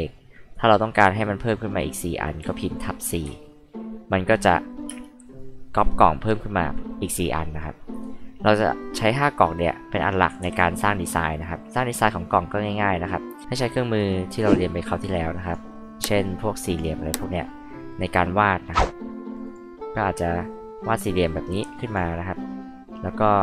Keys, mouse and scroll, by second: 2.4 KP_4, 3.2 KP_Enter, 4.6 scroll down 2, 4.8 space, 5.2 click, 15.4 click, 16.7 click, 19.4 click, 21.8 click.